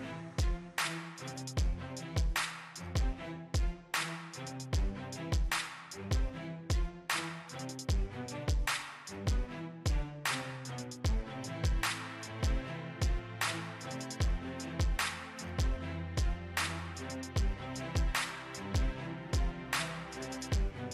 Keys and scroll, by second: 6.6 ctrl+x, 10.4 ctrl+shift+v.